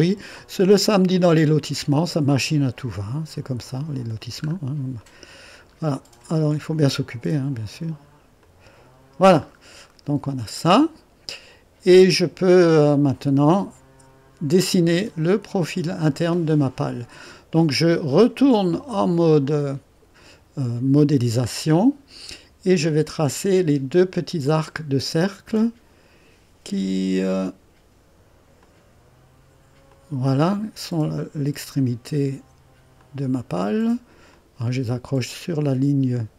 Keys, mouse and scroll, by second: 1.1 click, 3.6 click, 4.4-5.0 scroll up 2, 5.0 right click, 5.7-8.4 scroll up 1, 8.4 click, 9.4-10.3 scroll down 1, 10.3 right click, 12.1-13.1 drag, 13.6-14.6 drag, 15.0-15.5 scroll up 1, 15.5 right click, 18.7 click, 24.4 click, 27.4 click, 28.6 click, 29.9 click, 33.0 click, 34.3 click.